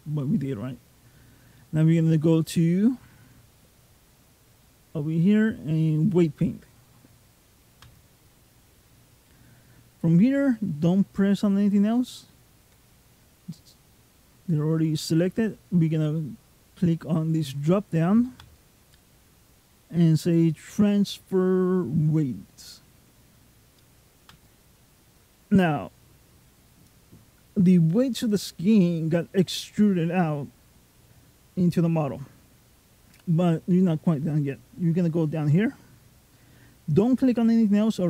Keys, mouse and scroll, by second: 2.3 click, 18.2 click.